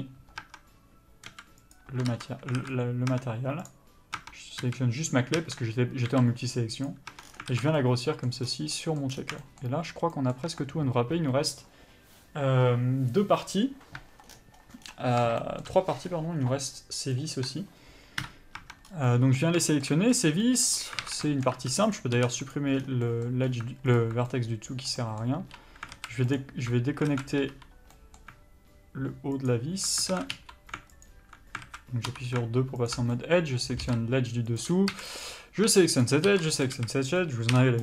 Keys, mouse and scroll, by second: 0.1 Return, 0.7 Tab, 1.6 s, 2.0 click, 2.4 ctrl+z, 2.9 alt+a, 3.4 Tab, 4.0 click, 4.5 Tab, 4.9 a, 6.4 s, 7.4 Tab, 7.5-8.1 scroll down 2, 7.8 alt+a, 8.1 middle click, 8.7 scroll up 1, 9.1 middle click, 9.4 scroll down 1, 9.7 shift+middle click, 14.5 scroll down 1, 15.1 scroll up 1, 15.7 shift+middle click, 16.0 scroll up 1, 16.7-17.7 scroll down 1, 17.7 click, 18.5 KP_Divide, 18.9 Tab, 19.2 scroll up 1, 19.4 middle click, 19.7 scroll down 1, 19.9 shift+middle click, 20.4 scroll up 1, 20.7 middle click, 21.1 scroll up 1, 21.3 alt+a, 21.5 shift+middle click, 21.9 1, 22.2 click, 22.8 x, 23.1 scroll down 1, 23.4 middle click, 23.7 scroll up 1, 24.3 alt+click, 24.6 middle click, 25.7 3, 26.2 alt+a, 26.7 alt+click, 27.4 alt+a, 28.2 middle click, 29.8 alt+click, 30.4 alt+a, 31.4 alt+click, 31.9 alt+a, 32.4 2, 33.2 alt+click, 33.4 middle click, 34.9 ctrl+e, 35.2 a, 35.5 click, 36.3 ctrl+click, 37.0 ctrl+e, 37.1 a, 37.5-37.8 scroll down 1.